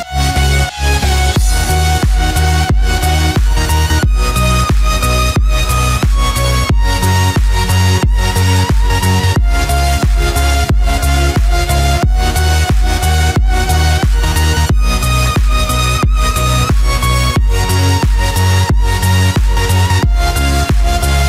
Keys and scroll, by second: 10.2 ctrl+=.